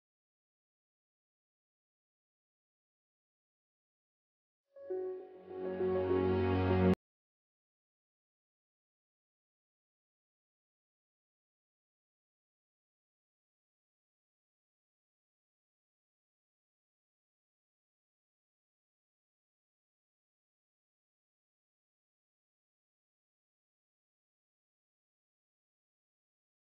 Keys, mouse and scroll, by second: 0.3 click, 4.0 ctrl+alt+y, 5.5 click, 5.9 ctrl+a, 6.4-7.4 typing, 8.3-14.3 drag, 14.9 ctrl+d, 16.3-20.6 drag, 20.6 space, 25.4 space, 25.8 click, 26.3 space.